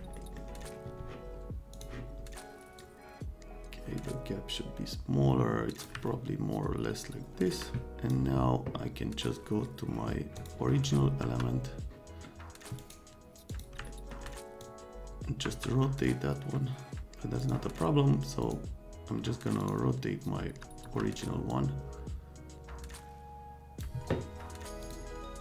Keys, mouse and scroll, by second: 0.2 right click, 1.7 middle click, 2.8-5.8 middle drag, 6.1-7.5 right drag, 7.9 middle click, 10.4 middle click, 11.2 F3, 12.7 right click, 13.5 click, 13.8 middle click, 14.6-17.0 drag, 15.4 F3, 17.4 click, 18.4 click, 19.6 click, 20.4 F3, 20.8 F3, 21.5-23.8 drag, 24.8 click.